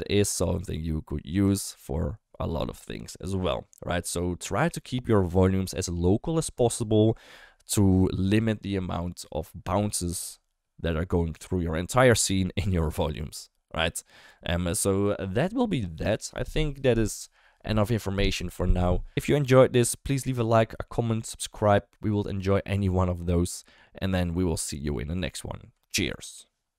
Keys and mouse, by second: 0.5-0.8 shift+middle drag, 1.5 shift+middle click.